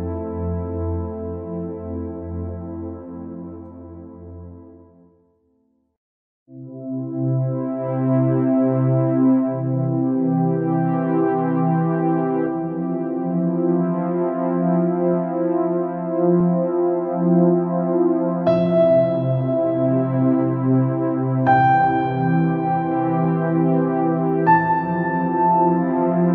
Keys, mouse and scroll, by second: 0.1 scroll up 1, 0.5 scroll down 1, 0.7-3.8 middle drag, 3.8-4.9 drag, 4.9-5.3 scroll up 2, 5.3 scroll down 2, 5.5 middle click, 6.4 scroll up 3, 6.7 scroll down 1, 6.8-9.3 middle drag, 9.3-12.4 drag, 14.2 scroll up 3, 14.3-14.6 scroll down 3, 14.6 click, 14.9 scroll down 1, 15.1 middle click, 15.6-15.9 scroll up 5, 16.1-17.9 middle drag, 17.9 scroll down 3, 18.1-19.1 middle drag, 19.1 scroll up 5, 19.4 scroll down 4, 19.7-21.7 middle drag, 21.7 scroll up 1, 22.0 scroll down 3, 22.2-25.2 middle drag.